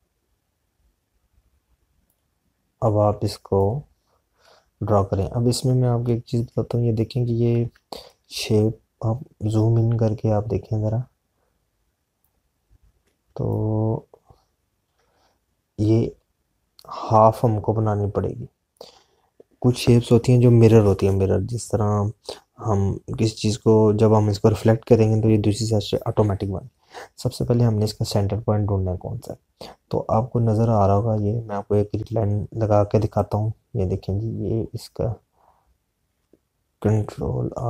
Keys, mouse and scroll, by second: 2.9 click, 8.6 z, 9.5 click, 13.1 click, 15.7 click, 34.4 click.